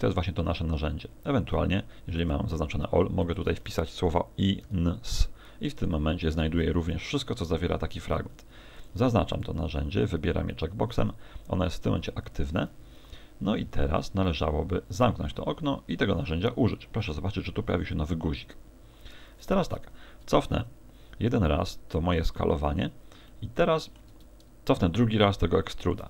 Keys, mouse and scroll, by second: 19.9 ctrl+z, 20.6 middle click, 22.6 scroll up 4, 23.3 shift+middle click, 24.8 ctrl+z.